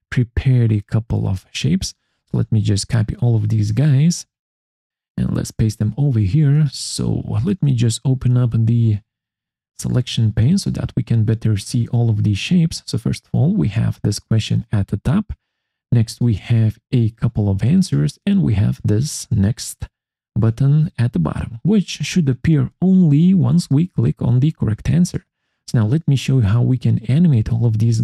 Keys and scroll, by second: 2.0 ctrl+c, 5.6 ctrl+v.